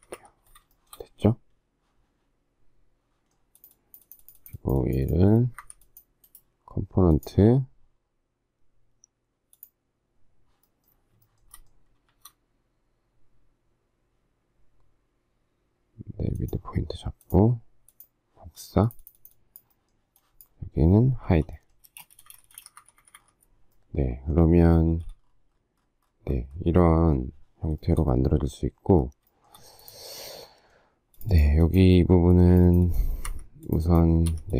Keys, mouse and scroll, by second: 0.7 shift+middle click, 5.6 Escape, 11.2 shift+middle click, 11.5 shift+middle click, 12.1 shift+x, 21.3 h, 21.8 space, 21.9 Escape, 22.9 Escape, 24.9 shift+a, 27.8 shift+middle click, 29.4 shift+middle click, 33.2 Escape, 34.2 Escape.